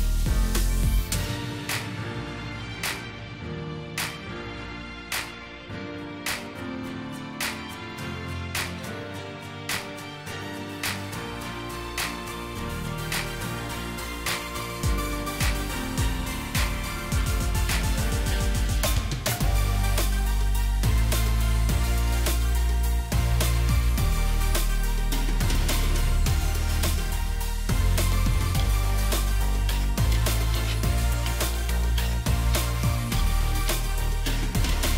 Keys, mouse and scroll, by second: 0.0 shift+click, 4.5 shift+click, 14.7 double click, 20.1 shift+click, 27.9 double click, 31.3 ctrl+shift+g, 33.0 ctrl+shift+g.